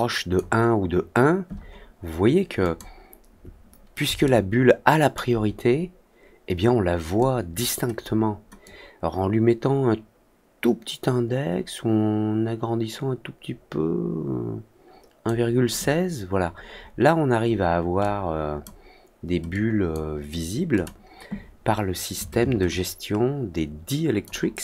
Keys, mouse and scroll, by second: 2.5 click, 4.2-5.1 alt+middle drag, 7.1 click, 8.6 click, 17.9 click, 19.4-19.8 drag, 20.7 click, 22.6-24.2 ctrl+drag.